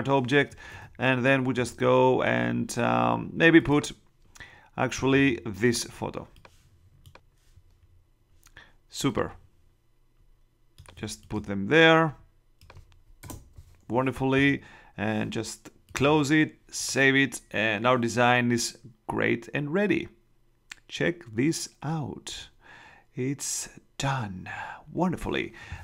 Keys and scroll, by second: 0.8 super+Tab, 13.2 shift+Return.